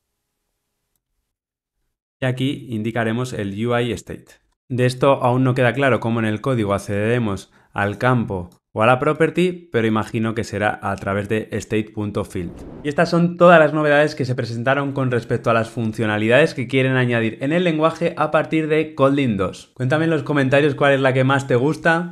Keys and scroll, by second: 2.9 Return.